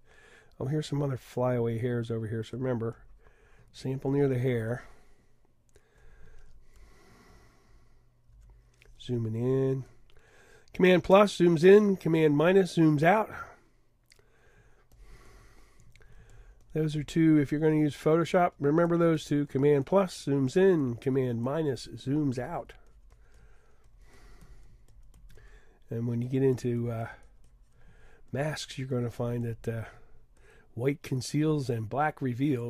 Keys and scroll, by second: 7.3 super+=, 8.0 super+=.